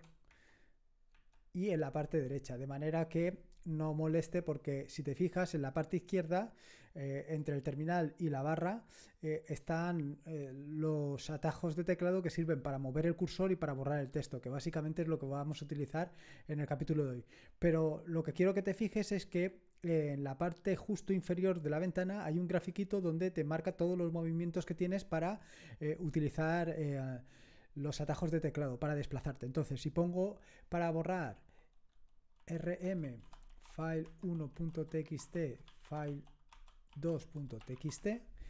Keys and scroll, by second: 0.3 super+Up, 1.1 super+Right, 32.1-38.4 typing.